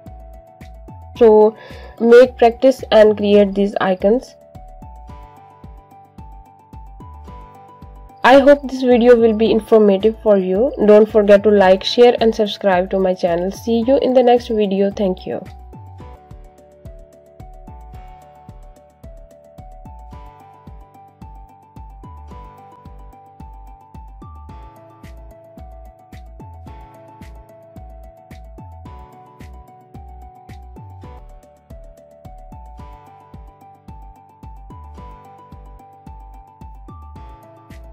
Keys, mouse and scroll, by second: 0.1 scroll up 1, 0.5 click, 2.3 shift+click, 3.4 click, 7.2 shift+click, 7.5 shift+click, 7.7 shift+click, 8.4 click, 10.0 click, 10.3 click, 10.7 click, 12.8 click, 15.0 ctrl+g, 15.1 click, 15.5 ctrl+g, 15.7 click, 16.0 ctrl+g, 16.1 click, 16.5 ctrl+g, 16.7 click, 19.2 click, 20.1 z, 20.6 click, 21.3 scroll up 1, 21.5 click.